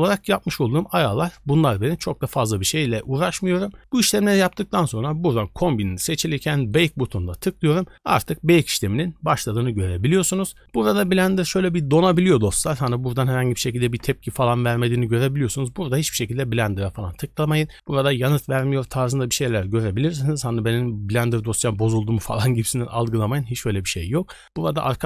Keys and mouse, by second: 6.7-25.0 drag.